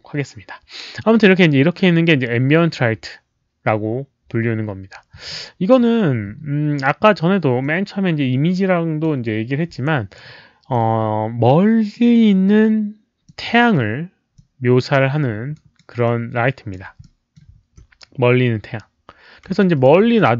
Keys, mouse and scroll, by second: 7.6-9.0 drag, 9.8 alt+right click, 10.8 w, 11.9 middle click, 13.2 middle click, 14.3 click, 15.5 alt+right click, 16.0 alt+w, 16.0 alt+click, 16.0 middle click, 17.0 middle click, 19.5 alt+click, 20.1 middle click.